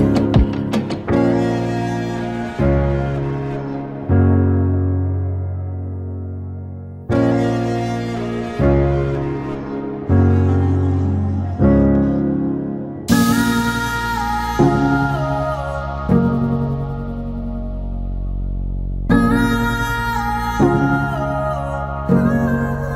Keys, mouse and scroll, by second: 0.6 Tab, 3.6-6.0 drag, 20.4 click.